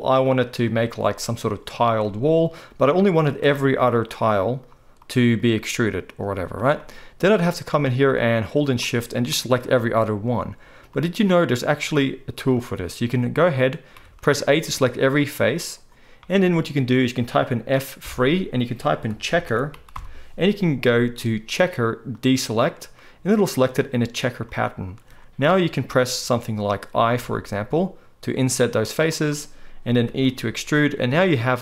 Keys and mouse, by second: 3.1 right click, 4.1-5.1 shift+middle drag, 5.1 shift+right click, 5.3 shift+middle click, 5.4 shift+right click, 6.0 shift+middle click, 6.1 shift+right click, 6.4 shift+middle click, 6.5-7.8 shift+right drag, 8.1 shift+middle click, 9.1 shift+middle click, 13.9 a, 18.0 F3, 20.9-30.1 right drag, 27.2 i, 30.1 e.